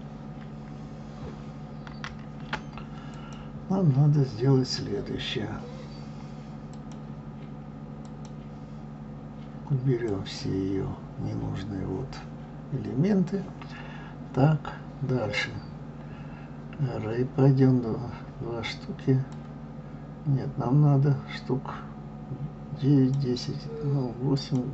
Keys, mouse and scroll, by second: 1.9 ctrl+z, 3.1 click, 6.7 click, 8.0 click, 10.0-10.6 drag, 19.3-22.4 drag, 24.4-24.7 drag.